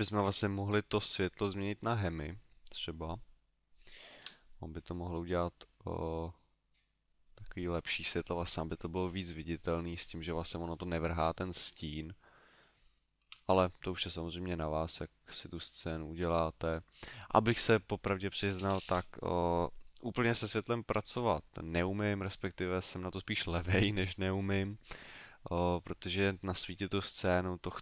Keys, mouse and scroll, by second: 1.0 click, 1.7 middle click, 13.1 Escape, 14.7 middle click, 15.5 middle click, 16.5 middle click.